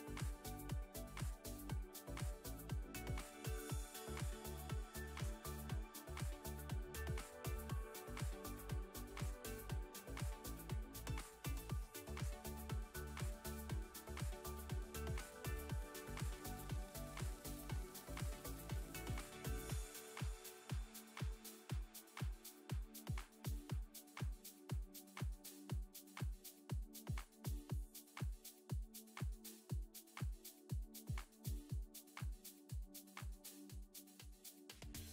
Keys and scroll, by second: 0.0 ctrl+z, 3.5 x, 6.0 Tab, 20.0 Tab, 23.5 Tab, 24.8 Tab, 27.7 2, 31.3 f, 31.9 Tab.